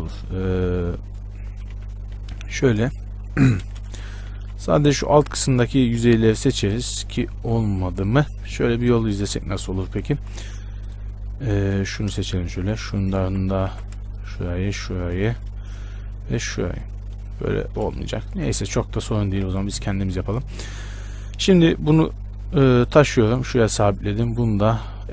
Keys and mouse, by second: 0.1 b, 2.0 a, 2.4 KP_1, 3.9 shift+space, 4.6 b, 10.4 middle click, 10.4 z, 11.0 click, 12.0 z, 13.5 click, 13.5 z, 15.7 middle click, 18.2 Tab, 19.4 KP_7, 19.7 z, 20.0 Tab, 24.0-25.1 right drag, 24.4-25.1 drag.